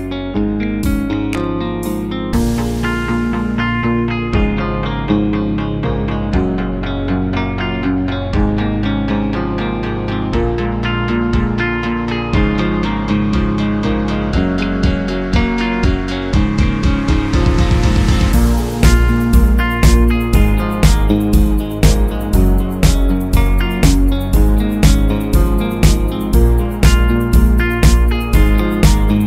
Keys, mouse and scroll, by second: 3.9 space, 4.0-6.0 drag, 15.6 shift+click, 16.5 shift+click, 17.2 shift+click.